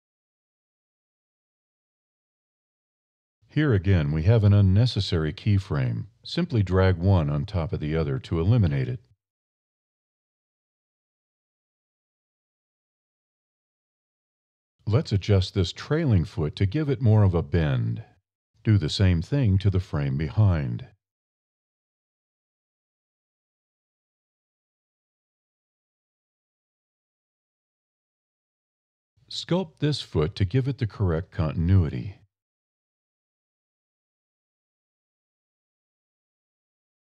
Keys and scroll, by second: 1.1 e, 17.2 e, 22.4 alt+e, 23.3 e, 32.0 alt+e, 32.6 e, 36.7 alt+e.